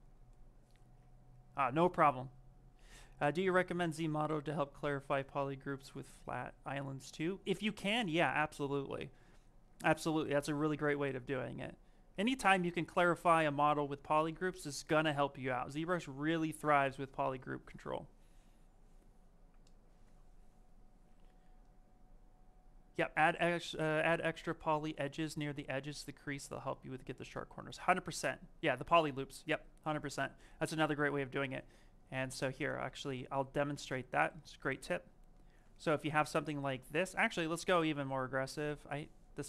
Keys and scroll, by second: 31.9 ctrl+z, 32.2 ctrl+z, 32.6 ctrl+z, 33.2 ctrl+z.